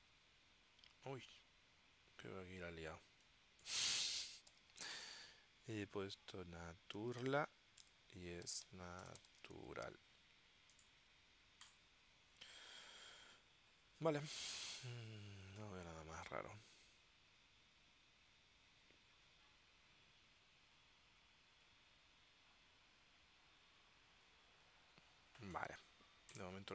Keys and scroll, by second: 4.4-5.7 typing, 6.8-10.2 typing, 7.9 Tab.